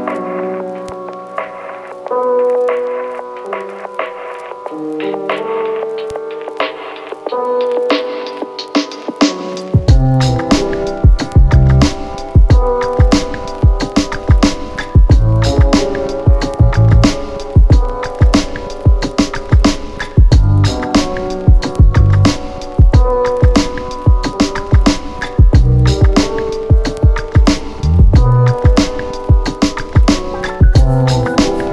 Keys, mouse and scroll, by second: 1.8-6.2 click, 10.6 space, 16.6-18.9 click, 21.1-24.3 typing, 25.3 Return, 25.6-28.0 typing, 28.7 ctrl+a, 29.5 click.